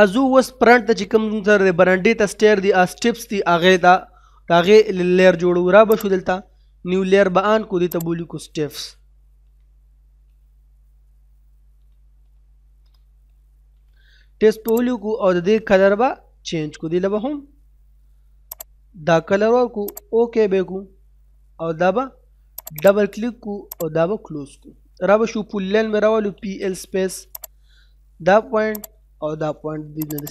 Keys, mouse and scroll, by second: 3.8 middle click, 6.0 click, 9.4 s, 11.6-11.9 typing, 13.2 p, 14.8 click, 18.5 click, 22.5 click, 24.3 middle click, 24.7-25.5 scroll up 1, 26.0-26.5 typing, 27.4 click, 30.2 right click.